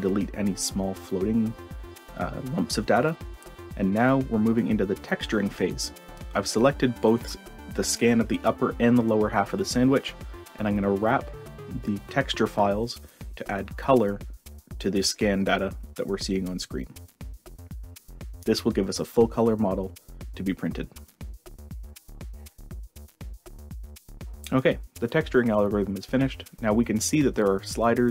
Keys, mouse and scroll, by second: 0.3 click, 1.4 shift+click, 4.2 click, 25.4-27.2 drag, 27.6-28.1 drag.